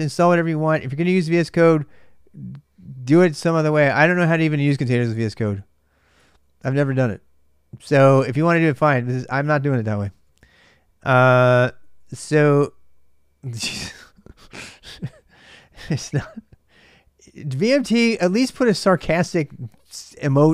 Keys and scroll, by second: 0.0-0.5 typing, 5.9 BackSpace, 6.1 BackSpace, 9.3-11.8 typing, 14.9-15.8 typing.